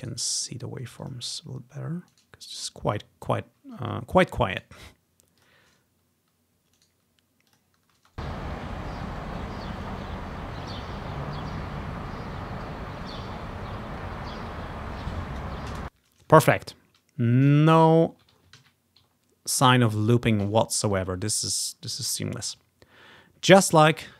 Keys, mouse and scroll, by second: 0.1 middle click, 1.1 middle click, 2.2 click, 3.0 click, 4.6 right click, 5.5 click, 6.4 typing, 6.9 right click, 7.6 click, 8.0 space, 8.9-10.2 ctrl+scroll up 1, 15.8 space, 16.9-18.0 ctrl+scroll down 2, 18.7 ctrl+z, 19.2 ctrl+scroll down 1, 20.5 ctrl+z, 20.9 click, 21.8-22.5 ctrl+scroll up 1, 22.5 ctrl+scroll down 1, 24.0 click.